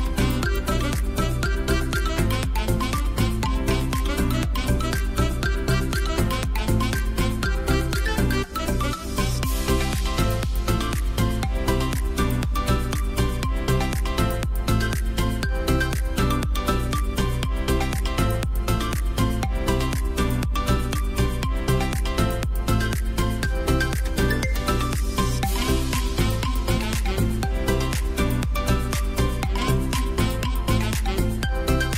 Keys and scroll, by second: 2.0 Delete, 3.1 space, 12.3 v, 12.9 space, 14.4 Delete, 15.9 space, 17.6 c, 19.8 v, 21.0 Delete, 26.4 v, 27.1 ctrl+z, 30.6 ctrl+j, 31.2 v.